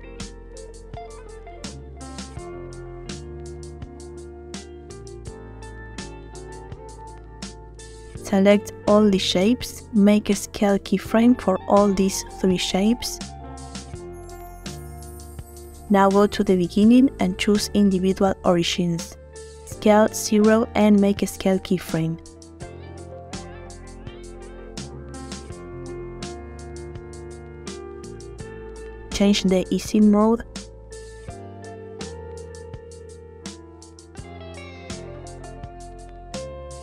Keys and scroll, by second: 5.0 alt+d, 5.7 alt+Escape, 12.8 i, 20.1 s, 21.4 0, 22.6 i, 25.3 space, 28.6 2, 28.9 5, 29.3 Return, 33.5 space, 36.5 space.